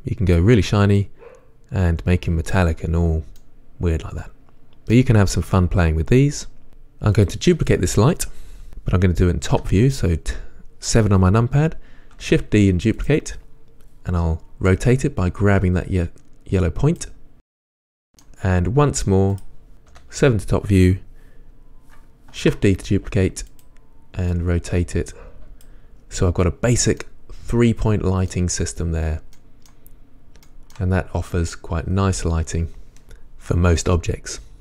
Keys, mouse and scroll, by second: 3.6-6.7 middle drag, 6.7-7.5 drag, 9.7 KP_7, 12.5 shift+d, 13.3 click, 15.0-17.3 drag, 17.3-19.6 middle drag, 19.6 click, 20.1 KP_7, 22.6 shift+d, 23.8 click, 24.6-27.2 drag, 27.2-34.6 middle drag, 30.2-30.7 scroll up 2, 31.4 scroll up 1.